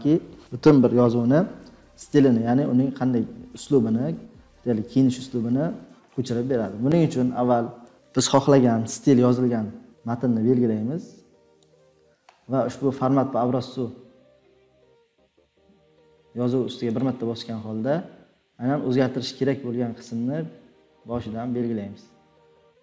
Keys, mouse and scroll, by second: 7.9 click, 11.6-12.7 drag, 17.7-19.8 drag.